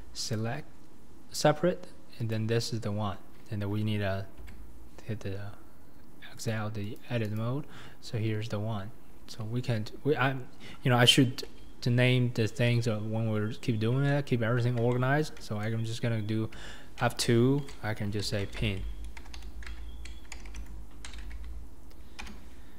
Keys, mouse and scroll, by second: 0.4 p, 2.3 click, 4.5 Tab, 6.5 click, 7.0 click, 7.4 click, 13.1 scroll up 3, 13.7-14.0 scroll down 4, 14.1-22.2 shift+middle drag, 22.2 BackSpace.